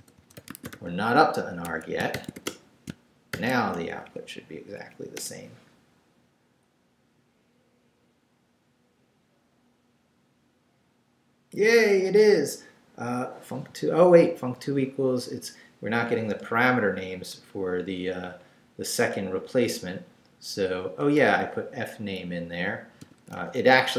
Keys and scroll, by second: 0.0-3.3 typing, 1.6 Escape, 4.0 shift+Up, 4.6 Up, 5.2 Return, 21.0 Return, 22.0 Right, 23.0-23.9 typing.